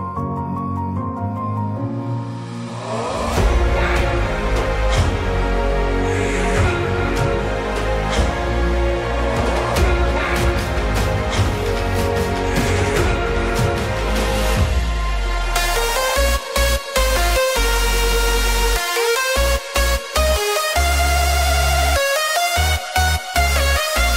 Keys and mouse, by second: 0.4 click, 4.2-4.9 shift+middle drag, 7.7-9.1 drag, 11.1 click, 12.1 click, 13.2-14.0 drag, 14.0-17.1 middle drag, 17.4-18.0 shift+middle drag, 19.1 click, 20.5 click, 21.2 click, 21.8 click, 22.8-24.1 drag.